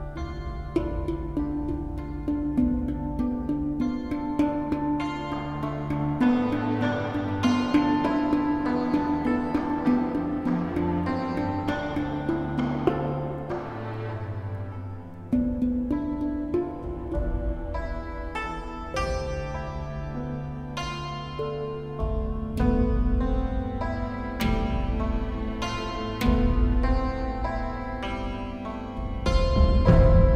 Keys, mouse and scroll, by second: 1.2 right click, 2.6 right click, 3.1 right click, 3.6 right click, 3.8 right click, 4.8 right click, 5.5 right click, 5.9 right click, 6.2 right click, 9.2 right click, 10.8 right click, 11.2 right click, 11.5 right click, 11.7 right click, 12.1 right click, 13.6 right click, 14.0 right click, 14.4 right click, 15.3 right click, 17.3 right click, 19.9 right click, 20.1 right click, 21.0 right click, 21.7 right click, 22.4 right click, 22.7 right click, 26.5 right click, 29.9 right click.